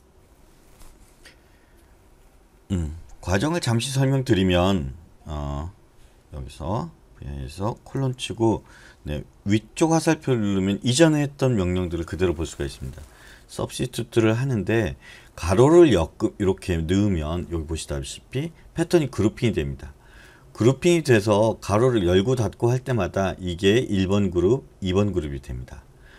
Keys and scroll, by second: 7.9 shift+;.